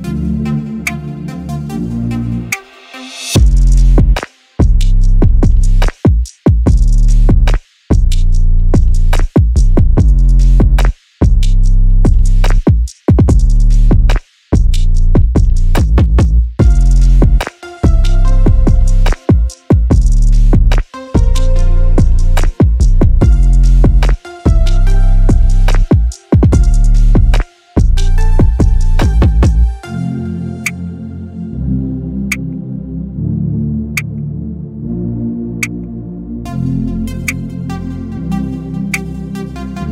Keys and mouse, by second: 1.6-3.4 middle drag, 4.0 click, 4.9 click, 6.4 click, 7.4-8.7 drag, 10.8 click, 11.5-12.3 middle drag, 13.9-14.4 drag, 14.4-14.9 middle drag, 16.5 click, 25.3 click, 28.4 click, 32.7 click, 35.1 click, 39.6-39.9 drag.